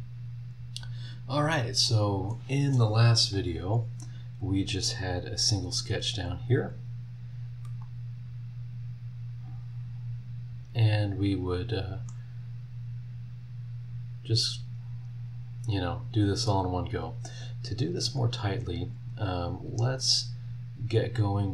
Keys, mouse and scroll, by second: 0.3 scroll down 2, 1.1 scroll up 2, 7.6 middle click, 7.8 click, 8.5 right click, 9.5 middle click, 9.9-10.9 right drag, 10.9-12.3 middle drag, 12.5 scroll down 1, 13.5 scroll up 1, 15.2 scroll down 1, 18.0 click, 19.1 click.